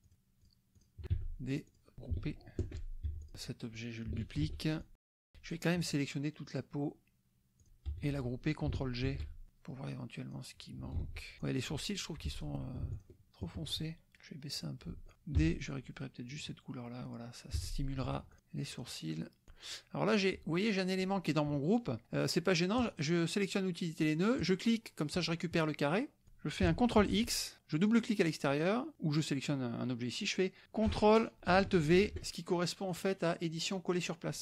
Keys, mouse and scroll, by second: 0.0 shift+click, 0.4 shift+drag, 0.7 shift+click, 1.1 d, 1.7 click, 2.0 F1, 2.6 ctrl+g, 3.1 ctrl+F1, 3.3 click, 4.4 ctrl+d, 4.8 ctrl+click, 5.8 click, 7.9 F1, 8.1 click, 9.0 ctrl+g, 9.5-10.5 drag, 11.0 ctrl+z, 11.4 shift+click, 12.5 click, 13.0 shift+click, 14.6 click, 15.1 shift+click, 15.4 d, 16.3 click, 17.5 F1, 18.8 shift+drag, 19.5 F1, 19.8-20.9 drag, 22.8 click, 24.4 click, 27.0 ctrl+x, 27.7 click, 29.2 click, 31.9 ctrl+alt+v, 32.9 click.